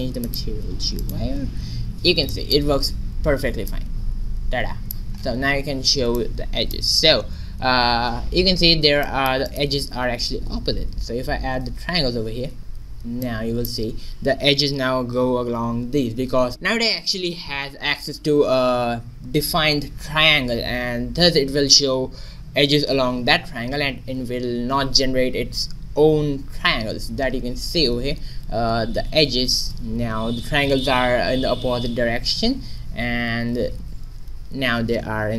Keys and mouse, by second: 0.5-1.8 drag, 1.8 shift+z, 2.0-3.6 middle drag, 4.1 middle click, 5.2 middle click, 6.7-8.3 middle drag, 8.3 shift+z, 9.0 middle click, 9.4 middle click, 9.7 Tab, 10.4 a, 10.9 ctrl+t, 10.9 middle click, 11.4 a, 11.6 Tab, 12.7 shift+z, 13.4-21.9 middle drag, 27.1 shift+z, 28.9 ctrl+z, 29.8 shift+z, 34.0 ctrl+shift+z.